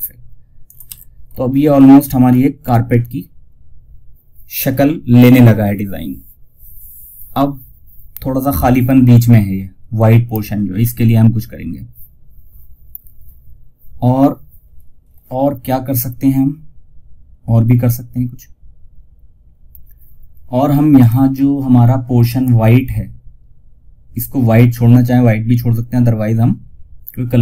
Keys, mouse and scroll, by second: 0.1 F2, 1.9 F9, 20.3 click.